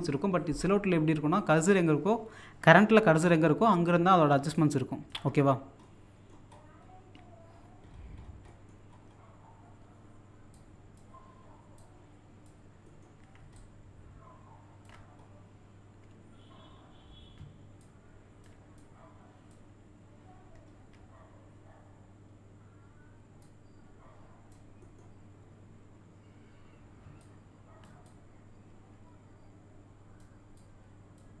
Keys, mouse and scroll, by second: 4.6 shift+click, 5.3-5.8 scroll down 1, 5.9 middle click, 6.6-7.6 scroll down 1, 7.8 scroll up 1, 8.5 middle click, 8.9-9.7 scroll up 1, 10.6-12.9 drag, 12.8 typing, 12.9 middle click, 13.6-15.1 shift+drag, 15.1-15.9 scroll up 1, 15.1 typing, 17.4-17.8 scroll up 1, 17.4 typing, 17.8-20.2 drag, 20.2-20.9 scroll down 1, 23.4-24.8 drag, 24.8 middle click, 25.3-26.0 scroll up 1, 27.0 shift+scroll up 2, 27.2-31.4 shift+drag.